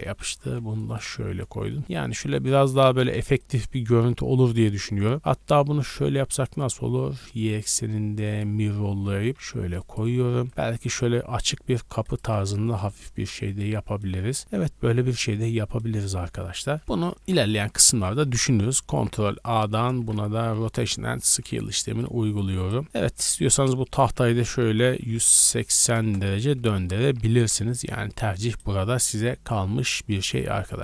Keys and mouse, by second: 0.0 g, 2.3 Tab, 2.6 a, 2.8 a, 3.4 click, 3.5-10.7 middle drag, 5.4 w, 9.3 g, 10.2 a, 10.4 a, 10.5 r, 12.2 a, 12.4 a, 13.4-17.3 middle drag, 17.2 ctrl+z, 17.9 ctrl+z, 18.2 ctrl+z, 20.0 ctrl+a, 21.4-22.5 middle drag, 21.4 a, 21.6 a, 22.5 click, 22.7 middle click, 23.3 Tab, 23.6 click, 23.6-24.8 middle drag, 24.6 ctrl+l, 25.0 r, 26.7 Tab, 27.1 a, 27.3 a, 28.4 click.